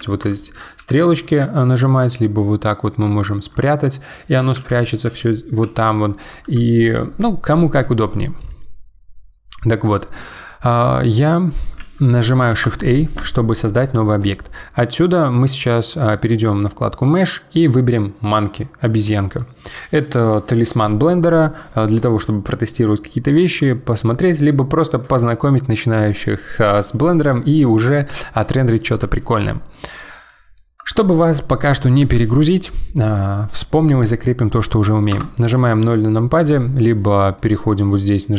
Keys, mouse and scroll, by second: 0.2 click, 0.8 n, 1.4-4.5 drag, 4.5 n, 5.0 n, 12.5 shift+a, 29.7-32.8 middle drag, 35.1 KP_0, 37.0-38.3 middle drag.